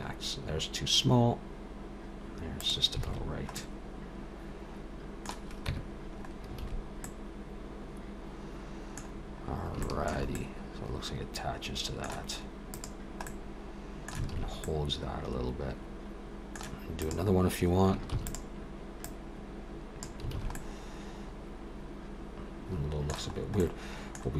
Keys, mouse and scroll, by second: 3.1 alt+a, 3.6 middle click, 5.7 Tab, 6.2-6.6 scroll up 3, 6.6 alt+a, 7.1 middle click, 9.2 scroll down 2, 9.8 shift+middle click, 10.3 middle click, 12.8 click, 13.3 middle click, 14.3 alt+a, 14.6 middle click, 17.0 click, 18.2 shift+d, 19.0 click, 20.4 alt+a, 20.5 middle click, 23.4 scroll up 1, 23.6 middle click.